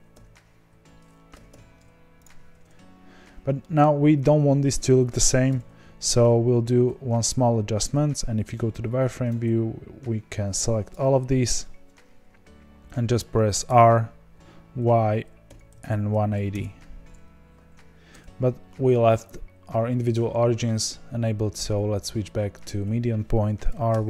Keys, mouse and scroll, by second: 0.6 b, 1.4 g, 3.2-3.5 scroll down 1, 3.5-5.5 middle drag, 5.5 KP_1, 7.3 z, 8.4 z, 10.9 click, 13.7 r, 22.6-23.7 drag, 23.7 r.